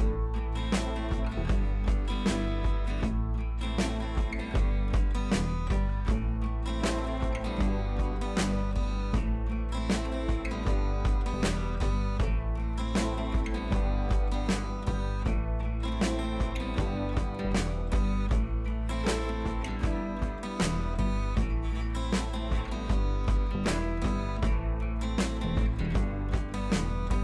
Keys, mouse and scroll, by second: 0.9 ctrl+[, 1.6 click, 2.3 shift+click, 2.7 right click, 3.2-11.2 drag, 14.5-16.8 drag, 18.2-19.2 drag.